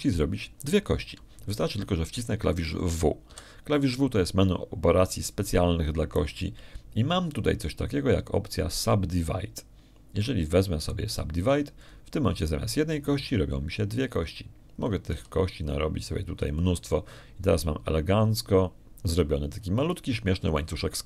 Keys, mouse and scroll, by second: 0.1 g, 1.2 click, 5.2 w, 13.7 click, 17.0 w, 17.5 click, 18.1 w, 18.4 click.